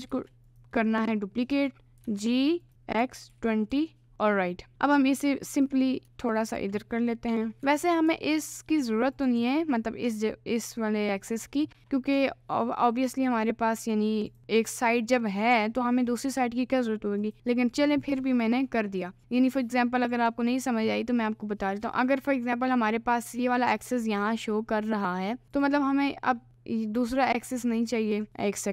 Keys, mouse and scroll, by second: 0.1 shift+d, 0.8 middle click, 2.0 g, 5.5 g, 11.8 middle click, 12.8 middle click, 14.3 click, 15.3 middle click, 17.3 click, 18.0-19.1 middle drag, 20.1 click, 27.6 middle click.